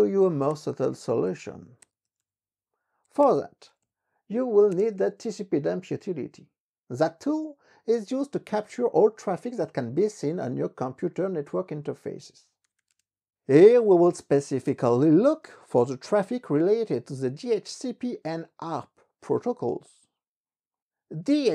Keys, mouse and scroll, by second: 0.5-5.3 typing, 12.2-15.1 typing.